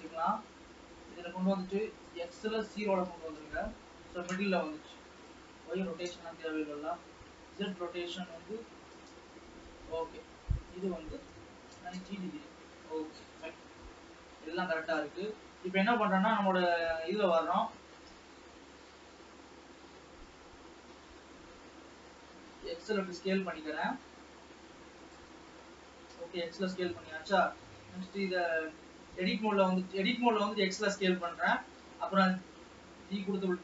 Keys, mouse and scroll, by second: 0.0 click, 4.8-14.4 drag, 14.4 n, 14.9 click, 15.4-15.9 scroll up 1, 15.9 Tab, 16.6-17.2 scroll down 1, 17.2-20.5 middle drag, 20.5 s, 26.2 KP_1, 27.2-27.6 scroll up 1, 28.1 g, 31.3 g.